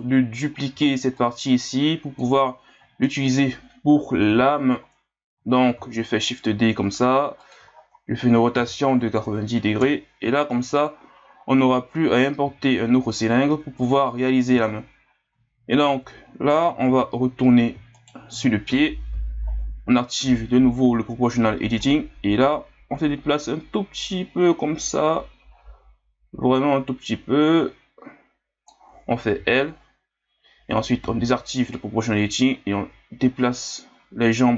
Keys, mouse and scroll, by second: 0.7 b, 2.5 scroll down 1, 3.0-4.3 scroll up 4, 4.3 o, 5.7 shift+d, 7.7 scroll up 3, 8.5 r, 10.5 scroll up 1, 11.4 scroll up 1, 12.4 g, 14.3-15.4 scroll down 12, 15.4-15.8 scroll up 1, 15.8 Tab, 16.5 scroll up 1, 16.9 Tab, 17.9 alt+right click, 18.7 KP_3, 19.5-20.2 scroll up 3, 20.2 o, 21.8-24.8 drag, 29.4 l, 31.0 o, 31.7-34.5 drag.